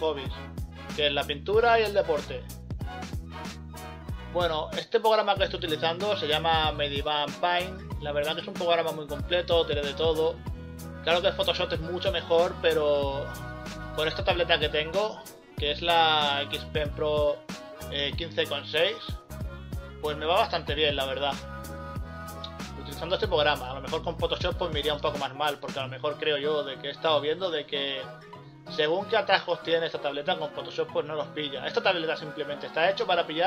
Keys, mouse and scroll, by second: 0.0 scroll up 1, 0.6 scroll down 1, 1.9 scroll up 1, 2.0 scroll down 1, 4.3 scroll up 1, 4.5-5.1 scroll down 2, 5.1 scroll up 1, 5.2 scroll down 1, 5.4 scroll up 1, 5.9 scroll down 1, 6.0 scroll up 1, 6.7 scroll up 1, 7.6 right click, 8.2 scroll down 1, 9.1-9.6 scroll down 3, 11.3 ctrl+z, 13.4 scroll down 1, 13.6-14.3 scroll up 1, 14.8 scroll up 1, 15.5 ctrl+z, 16.2 scroll up 1, 16.5 ctrl+z, 16.9 scroll down 1, 17.1-17.5 scroll up 1, 17.7 ctrl+z, 17.8 scroll up 1, 20.8 scroll up 1, 21.2 scroll down 1, 22.4 ctrl+z, 23.5 ctrl+z, 25.9 scroll down 1, 26.4 ctrl+z, 27.0 scroll up 1, 28.0 scroll up 1, 28.2-28.8 scroll down 2, 30.4 scroll up 1, 30.6 scroll down 1, 31.4 ctrl+z, 33.0 scroll up 1.